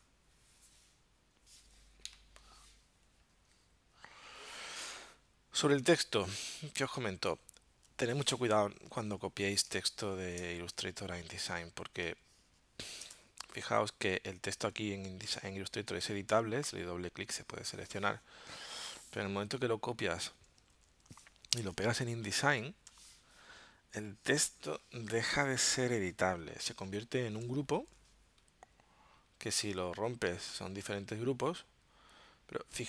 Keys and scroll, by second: 6.5 super+Tab, 9.1 z, 9.7 space, 12.0 space, 13.1 v, 20.8 super+c, 21.1 super+Tab, 22.7 super+v, 25.1 space, 27.7 shift+super+g.